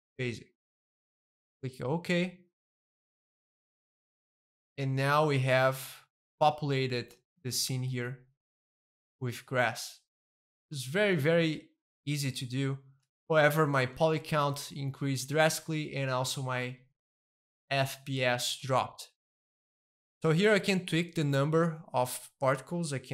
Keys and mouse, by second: 0.0-2.0 drag, 3.3-7.5 middle drag, 7.8 a, 8.5-10.5 middle drag, 10.7-12.2 shift+middle drag, 12.2-13.6 shift+middle drag, 13.9-16.7 shift+middle drag, 16.8-17.9 shift+middle drag, 18.1-21.4 shift+middle drag, 21.1-22.4 drag, 22.4 middle click.